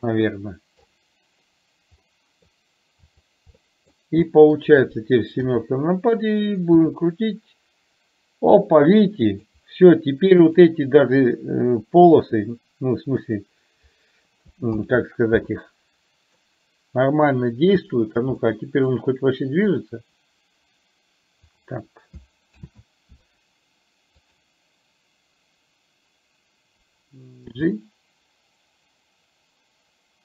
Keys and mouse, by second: 2.1 middle drag, 3.3 click, 3.5-4.0 middle drag, 4.4 middle drag, 10.6 click, 16.5 middle click, 18.5-19.0 middle drag, 19.9-21.5 drag, 24.4 click.